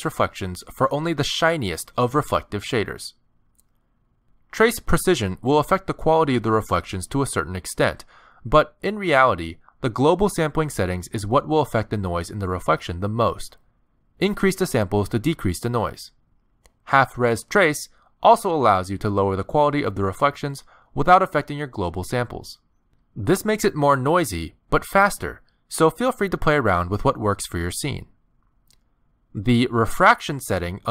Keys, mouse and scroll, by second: 2.9 click, 6.2 click, 8.5 click, 10.9 click, 12.1 KP_0, 16.7 click, 18.9 click, 21.1 click, 22.6 click, 23.4 KP_0, 24.9 click, 25.8 click, 26.8 click.